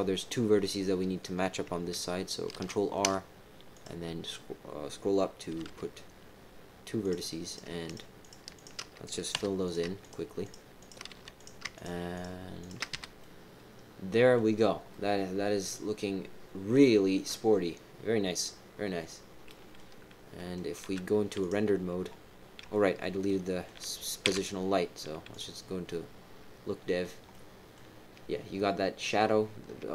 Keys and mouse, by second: 2.5 ctrl+r, 5.5 g, 7.4-8.1 typing, 7.4 click, 7.8 shift+click, 8.2 shift+click, 8.5 shift+click, 9.3 f, 9.6 click, 10.0 shift+click, 10.4 shift+click, 10.7 shift+click, 11.1 f, 11.3 click, 11.7 shift+click, 12.1 shift+click, 12.6 shift+click, 12.9 f, 13.2 click, 13.4 middle click, 14.9-18.4 middle drag, 19.4 middle click, 20.3 middle click, 20.8 z, 22.7 shift+middle click, 23.2 middle click, 24.2 z, 25.8-27.0 middle drag, 27.3 middle click.